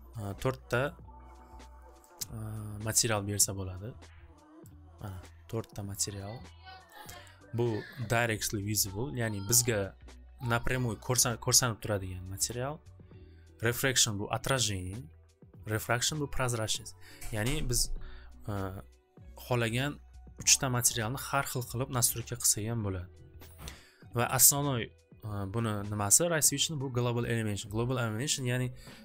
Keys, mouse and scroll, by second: 0.5-1.9 drag, 2.1 click, 4.7 click, 5.9 click, 6.9 click, 9.1 click, 12.6 click, 13.9 click, 16.0 click, 20.8 click, 26.7 click, 27.8 click.